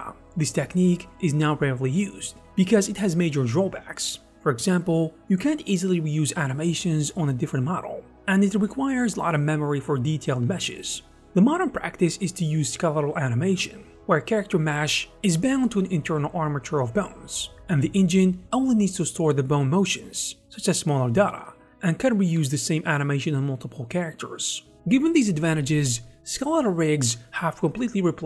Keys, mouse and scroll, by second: 11.3 e, 13.3 g, 14.0 g, 14.1 e, 15.9-21.5 typing, 17.6 click, 18.7 Escape, 20.8 Return, 22.8-23.2 typing, 22.8 Escape, 23.3 Return, 23.5 Tab, 25.5 z, 26.4 w, 26.4 z.